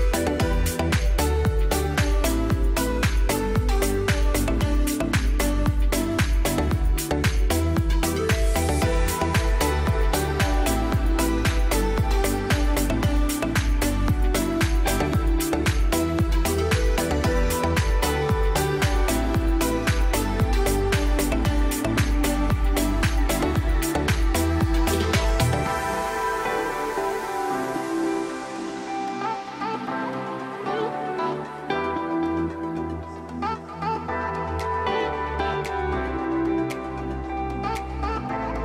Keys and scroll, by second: 1.2 2, 1.3 5, 1.4 Return, 1.9 F3, 3.8 shift+F2, 4.2 F3, 13.1 alt+c, 16.9 shift+Page_Up, 17.7 Escape, 18.9 shift+Page_Up, 19.4 Escape, 22.3 F6, 24.2 space, 25.3 Escape, 32.3 r, 32.5 Escape.